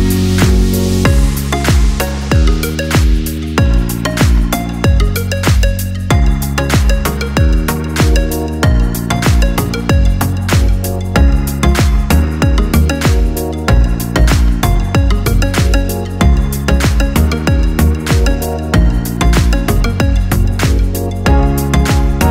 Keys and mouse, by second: 1.7 a, 3.0 shift+d, 10.8 r, 14.6 r, 19.7-22.3 middle drag.